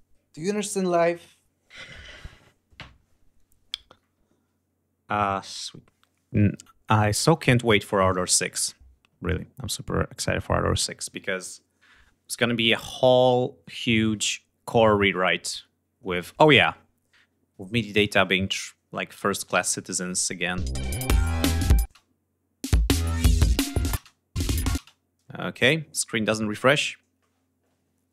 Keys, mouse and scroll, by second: 17.7 click, 18.9 ctrl+scroll up 2, 19.5 ctrl+g, 20.0 ctrl+scroll down 2.